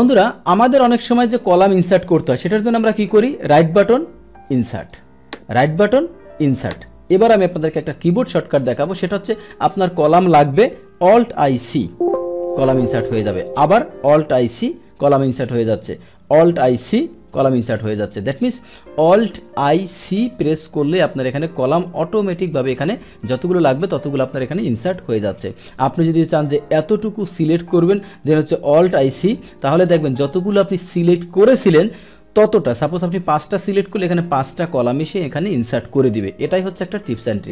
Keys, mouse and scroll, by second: 0.0 click, 3.1 right click, 3.9 right click, 4.4 click, 4.8 click, 5.5 right click, 6.5 click, 7.1 click, 8.2 ctrl+z, 8.8 ctrl+z, 8.8 click, 9.4 click, 13.3 click, 15.6 click, 18.4 click, 20.3 click, 22.0 ctrl+z, 22.3 ctrl+z, 22.3 ctrl+z, 22.7 ctrl+z, 26.3-27.8 drag, 34.8 ctrl+x, 36.2 ctrl+z, 36.8 ctrl+z.